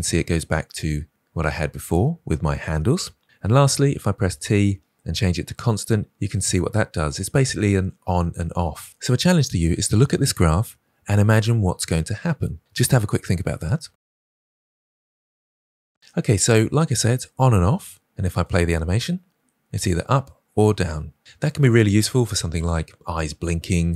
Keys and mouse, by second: 4.3 t, 18.2 space, 21.7 space.